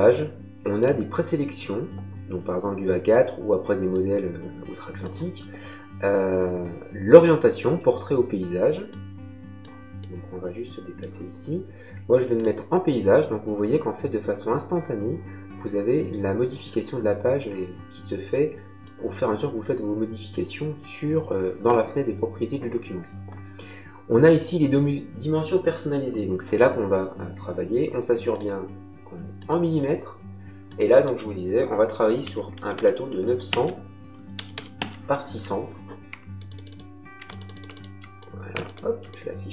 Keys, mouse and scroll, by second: 0.7 click, 3.8 click, 8.8 click, 9.9 middle click, 12.3 click, 18.2 click, 28.2 click, 29.3 click, 30.6 click, 32.2 KP_9, 32.5 KP_0, 33.4 Tab, 34.1 KP_6, 34.3 KP_0, 34.7 Tab, 36.3 ctrl+middle click, 37.2 shift+middle click, 38.6 shift+middle click.